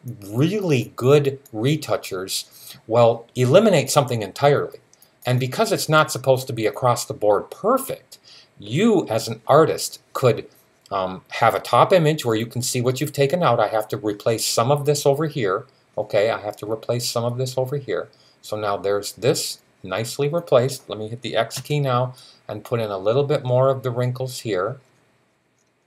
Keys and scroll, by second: 21.4 x.